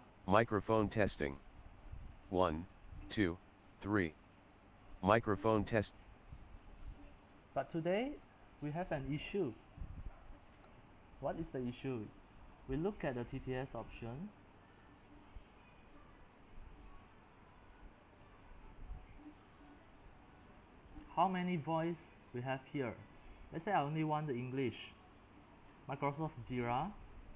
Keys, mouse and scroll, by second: 0.0-5.0 drag, 5.9-27.3 drag.